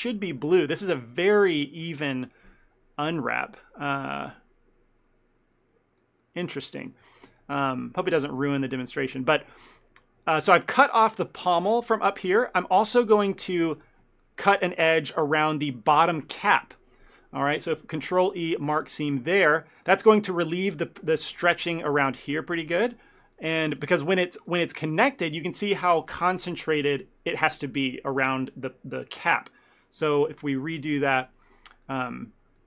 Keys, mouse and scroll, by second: 4.0 ctrl+middle click, 7.2 shift+middle click, 7.5 ctrl+middle click, 7.9 shift+middle click, 12.0 middle click, 12.6 shift+middle click, 12.9 ctrl+middle click, 13.9 alt+click, 14.3 middle click, 18.1 ctrl+e, 19.9 shift+middle click, 20.3 ctrl+middle click, 21.3 shift+middle click, 23.3 ctrl+middle click, 23.9 ctrl+z, 24.6 ctrl+middle click, 24.9 shift+middle click, 25.2 ctrl+middle click, 30.3 ctrl+shift+z, 31.3 ctrl+middle click.